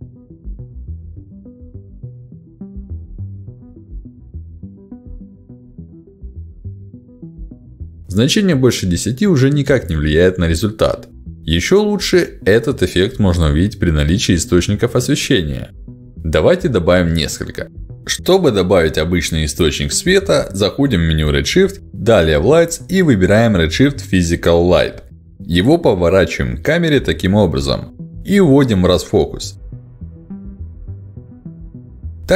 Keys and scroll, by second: 4.7 1, 4.8 0, 5.1 Return, 9.8 1, 9.9 0, 10.3 Return, 12.9 1, 13.2 0, 13.6 Return, 24.7 w, 25.0 e, 29.6 w.